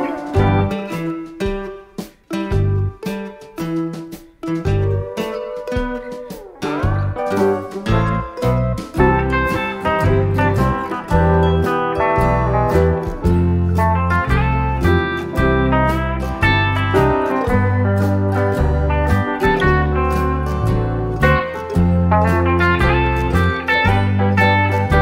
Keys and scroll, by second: 3.4 shift+F6, 7.9 F7, 8.4 F1, 10.7 ctrl+-, 15.3 ctrl+d, 17.4 F7, 18.0 F1.